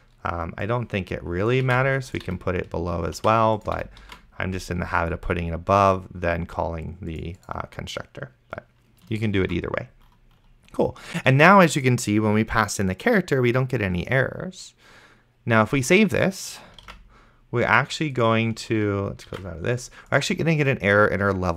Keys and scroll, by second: 2.0 ctrl+x, 2.6 ctrl+v, 3.4 ctrl+z, 4.1 ctrl+v, 4.4 s, 8.1 ctrl+s, 9.7 ctrl+s, 17.2 ctrl+s.